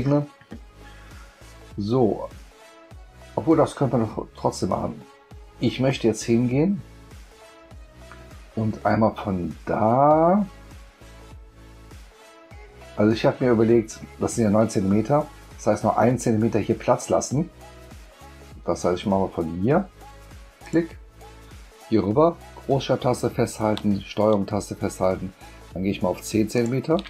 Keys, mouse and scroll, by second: 20.6 click, 26.5 ctrl+shift+click.